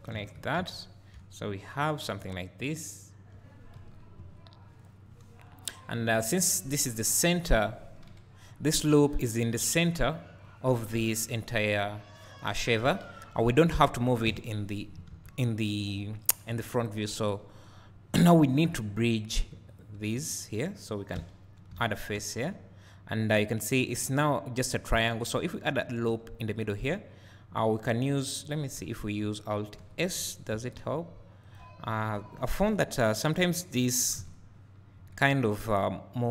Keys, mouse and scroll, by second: 3.8 KP_1, 4.2 KP_3, 5.4 scroll down 1, 6.9 KP_1, 8.2 KP_3, 9.4 alt+click, 10.9 KP_1, 12.8 KP_3, 14.3 KP_1, 15.1 alt+a, 17.1 KP_3, 17.7 scroll up 1, 19.8 click, 21.2 f, 21.9 a, 25.8 ctrl+r, 26.8 right click, 28.8 KP_1, 29.8 KP_3, 32.5 alt+s, 33.8 click, 34.2 KP_1, 35.0 KP_3.